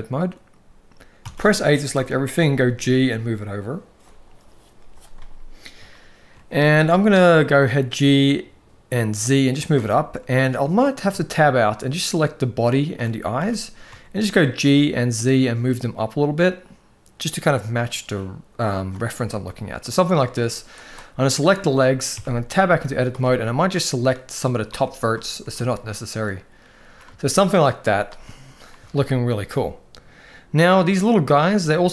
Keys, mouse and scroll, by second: 1.0 a, 1.7-2.1 shift+middle drag, 2.4 g, 5.8 shift+middle drag, 6.5 g, 9.7-10.0 shift+middle drag, 10.7 Tab, 12.0-12.7 drag, 13.1 g, 19.2-19.8 shift+middle drag, 21.9 Tab, 22.3-23.0 shift+middle drag, 22.6 z, 23.3-24.2 drag, 24.4 x, 25.4-25.9 shift+middle drag, 27.0-27.3 shift+middle drag, 27.6 z, 28.6-29.0 shift+middle drag, 31.0-31.3 middle drag, 31.6 shift+middle drag.